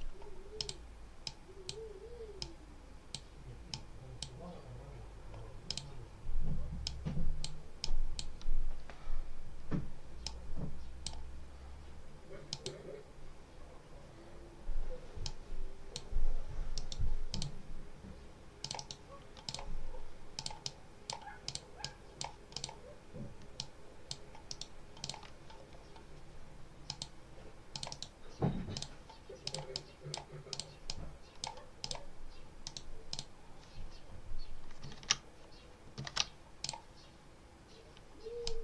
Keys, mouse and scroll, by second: 0.4 click, 1.1-1.8 drag, 2.3 click, 3.6 click, 5.6 click, 6.7-7.5 drag, 7.7 click, 10.1 click, 12.4 click, 15.1 click, 16.6 right click, 17.2 click, 18.5 click, 18.7 right click, 19.4 click, 20.2-21.2 drag, 21.4 click, 22.4 click, 23.4 click, 24.4 right click, 24.9 click, 26.8 click, 27.6 click, 28.6 click, 29.4 click, 30.4 click, 30.8 click, 31.7 click, 32.5 right click, 33.0 click, 34.8 ctrl+z, 36.5 ctrl+click, 38.4 click.